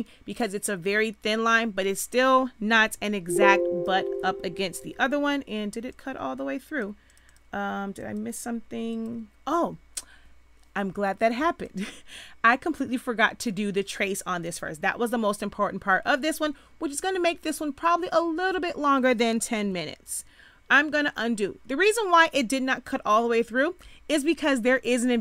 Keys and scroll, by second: 2.8 z, 4.8 ctrl+z, 20.0 ctrl+z.